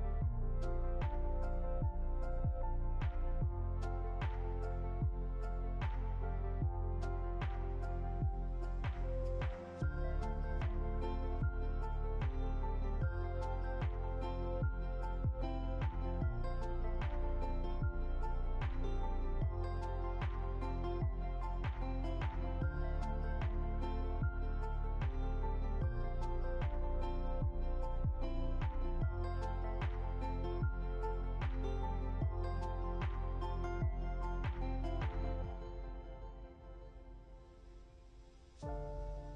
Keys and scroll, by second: 1.2 Down, 6.1 ctrl+c, 6.3 ctrl+f.